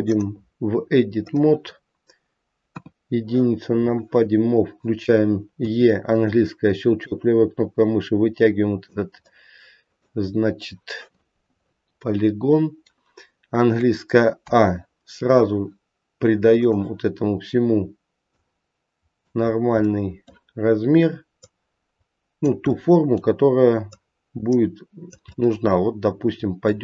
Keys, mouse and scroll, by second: 0.1 click, 2.7 KP_1, 3.9 click, 5.7 e, 7.1 click, 9.2 middle click, 10.3-12.0 scroll up 2, 12.0 middle click, 12.0 scroll up 1, 14.4 a, 16.6 click, 18.4 click, 19.6 scroll down 3, 19.9 middle click, 21.4 click, 23.4 middle click, 23.9 click, 25.3 middle click.